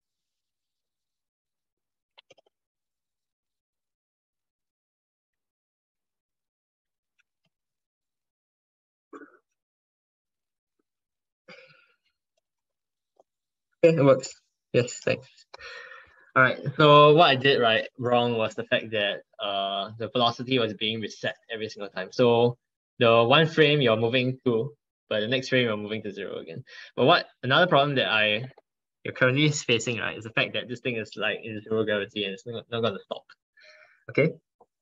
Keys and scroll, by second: 0.1 ctrl+shift+Left, 0.6 ctrl+shift+Right, 0.8 ctrl+shift+Right, 1.1 ctrl+shift+Right, 2.0 ctrl+x, 4.2 ctrl+Right, 4.5 ctrl+Right, 4.8 ctrl+Left, 5.2 ctrl+shift+Right, 5.7 ctrl+v, 6.3 ctrl+Left, 7.6 ctrl+Left, 7.7 ctrl+Left, 7.9 ctrl+Left.